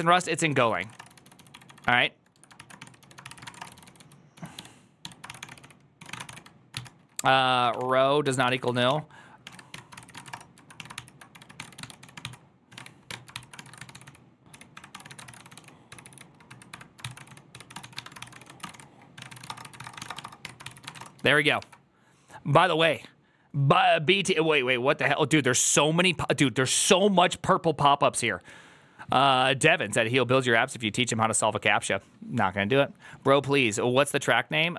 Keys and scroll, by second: 0.1 alt+{, 0.4-21.5 typing, 6.1 ctrl+c, 22.8 alt+[.